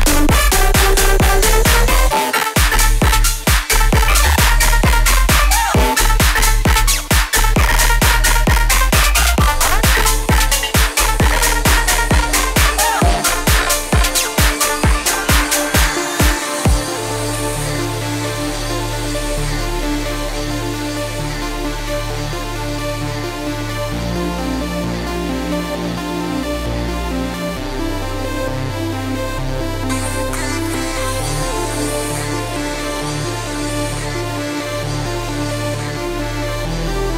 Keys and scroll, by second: 25.5 ctrl+z, 26.2 ctrl+z, 28.9 ctrl+z.